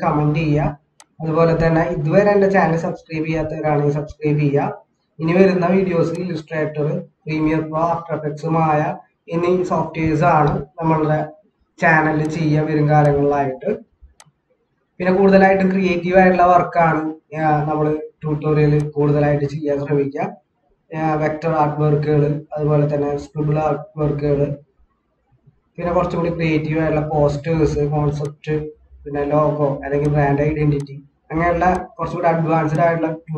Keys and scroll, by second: 9.8 ctrl+-, 11.2 ctrl+=, 14.9 ctrl+-, 17.6 ctrl+=.